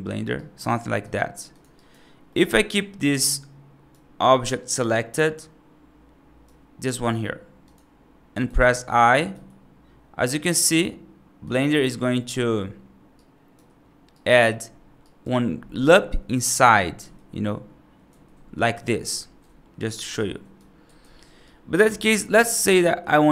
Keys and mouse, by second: 0.2 right click, 1.0 click, 1.6 right click, 2.1 middle click, 3.1 right click, 4.8-6.3 right drag, 8.2 right click, 9.2 i, 12.0 middle click, 13.0 right click, 14.0 right click, 14.9 right click, 16.9 g, 20.1 right click, 20.9 ctrl+z, 21.3 right click, 22.6-23.3 right drag.